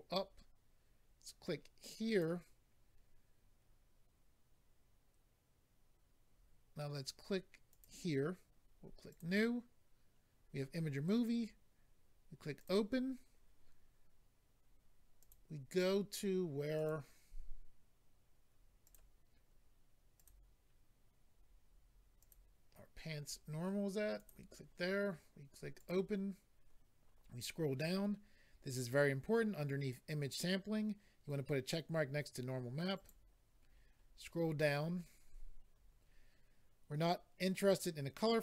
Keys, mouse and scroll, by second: 2.1 click, 2.2 click, 7.7 click, 7.8 click, 9.1 click, 9.2 click, 10.1 scroll down 2, 10.9 scroll down 2, 12.5 click, 12.6 click, 15.2 click, 15.3 click, 16.7 click, 16.8 click, 18.8 click, 18.9 click, 20.1 click, 20.2 click, 20.2 click, 22.1 click, 22.3 click, 24.1 click, 24.2 click, 25.7 click, 25.8 click, 27.1-27.6 scroll down 4, 32.9 click, 33.6-34.0 scroll down 4.